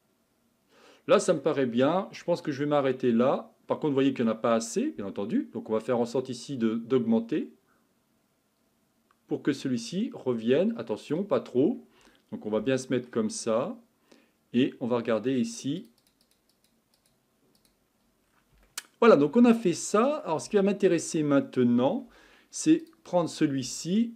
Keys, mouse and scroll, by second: 1.8-2.3 scroll down 4, 2.3-6.1 middle drag, 6.1-9.2 drag, 11.5-12.6 scroll up 5, 12.6 shift+middle click, 13.3-15.5 scroll up 1, 15.5-18.3 drag, 18.3-22.1 middle drag, 22.1 Tab, 22.8 click.